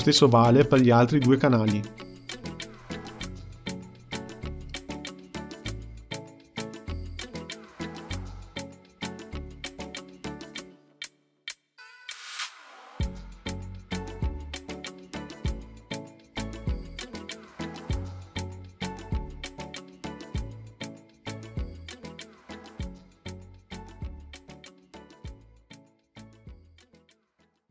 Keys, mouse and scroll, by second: 1.6-4.7 drag, 6.5-8.4 drag, 9.6-12.7 drag, 16.2-20.0 drag.